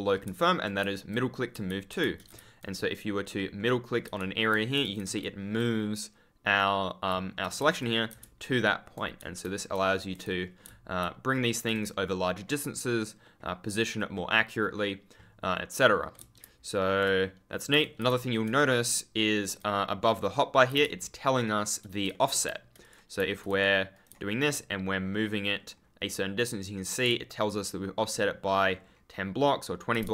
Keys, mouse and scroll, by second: 0.7 w, 1.7 ctrl+w, 1.8 ctrl+d, 1.9 ctrl+space, 3.3 middle click, 4.0 d, 4.7 ctrl+s, 7.0 a, 7.7 d, 8.2 ctrl+d, 9.4 ctrl+space, 10.3 middle click, 10.6 ctrl+w, 11.5 ctrl+d, 12.2 middle click, 14.2 middle click, 16.2 ctrl+w, 16.4 ctrl+space, 17.7 ctrl+w, 18.0 ctrl+space, 18.1 ctrl+a, 18.7 middle click, 20.6 w, 20.7 space, 22.0 middle click, 22.2 w, 22.7 click, 23.9 right click, 24.0 w, 25.0 scroll up 1, 27.6 ctrl+w, 28.6-29.0 scroll up 1.